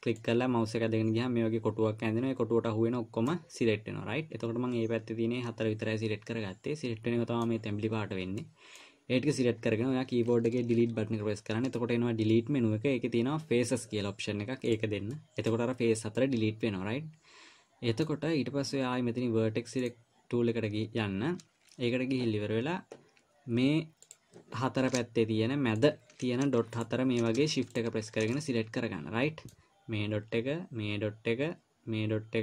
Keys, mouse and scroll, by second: 0.6 click, 3.9 middle click, 8.8 middle click, 11.1 Delete, 15.5 middle click, 16.5 middle click, 20.2 click, 24.4 click, 26.1 shift+click, 28.8 middle click.